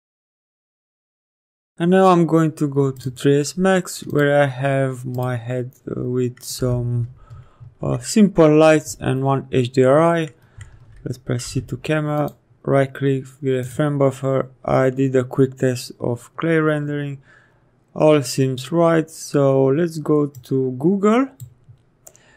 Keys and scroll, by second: 6.5 p, 11.3 c.